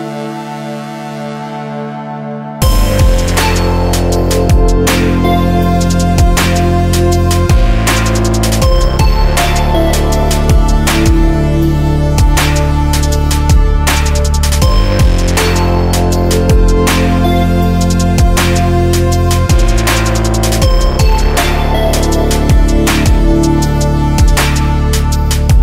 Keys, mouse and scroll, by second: 0.3 middle click, 0.9 click, 2.0 middle click, 2.5 click, 3.8-4.9 drag, 7.7 KP_0, 10.8 click, 11.6-13.0 drag, 13.4 click, 14.7 click, 15.6 click, 16.0 KP_0, 19.8 middle click, 20.5 click, 21.4 right click.